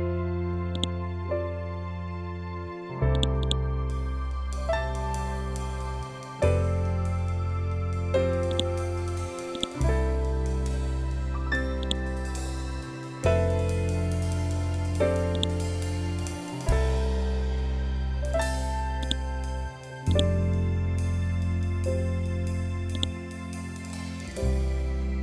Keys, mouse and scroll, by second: 0.2-2.6 drag, 3.4-5.0 scroll down 1, 8.0-9.9 drag, 9.9-10.4 scroll up 1, 11.3-13.5 drag, 13.5-13.9 scroll up 1, 14.8 scroll up 1, 14.8-17.9 drag, 18.5 click, 20.1 scroll up 1, 22.4 ctrl+click.